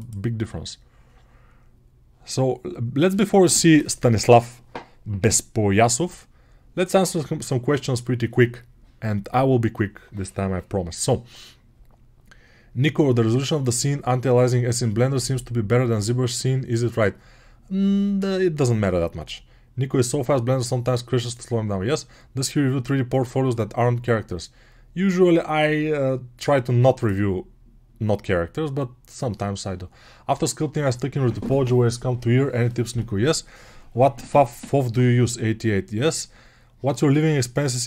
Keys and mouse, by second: 0.0-37.8 drag.